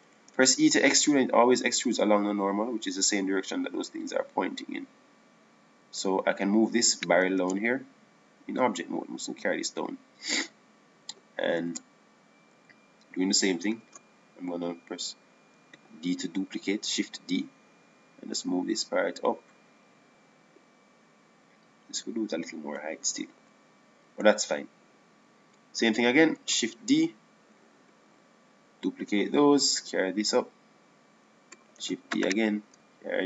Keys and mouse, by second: 0.1 a, 0.3 a, 1.6 e, 9.5 Tab, 10.1-12.0 drag, 13.5 Tab, 14.1 a, 14.3 a, 15.4 shift+d, 19.5 click, 28.0 shift+d, 30.9-32.7 drag.